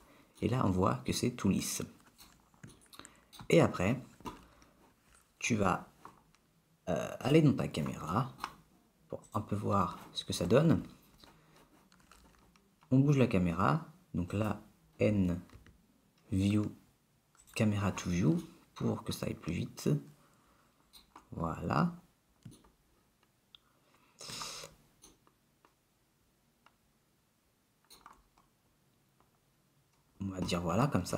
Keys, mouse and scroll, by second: 0.5 middle click, 3.0 shift+middle click, 7.3 click, 8.3 middle click, 9.4 click, 14.3 click, 15.1 n, 15.6 n, 17.5 click, 18.5 middle click, 21.6-22.7 scroll up 5, 22.8 shift+middle click, 23.3 shift+middle click, 24.2 shift+middle click, 24.3 shift+middle click, 25.3 middle click, 26.2 middle click, 26.4 middle click, 26.6 middle click, 27.1 middle click, 27.4 middle click, 27.8 middle click, 28.4-29.7 scroll up 2, 29.7 scroll down 1.